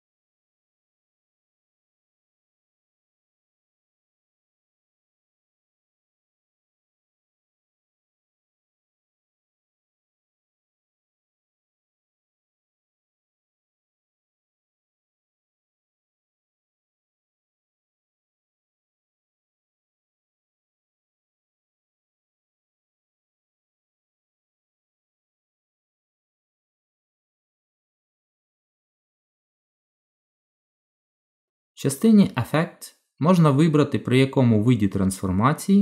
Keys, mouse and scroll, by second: 3.3 shift+s, 6.9 middle click, 9.4 middle click, 11.0 click, 15.2 middle click, 17.8 g, 30.6 click.